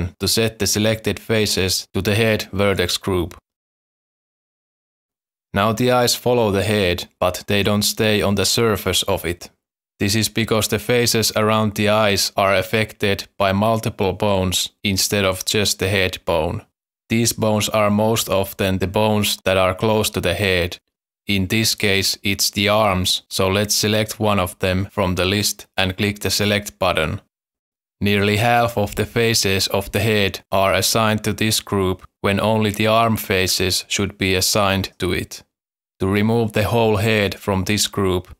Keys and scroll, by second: 3.7 Tab, 6.1 Tab, 6.2 z, 12.1 Tab.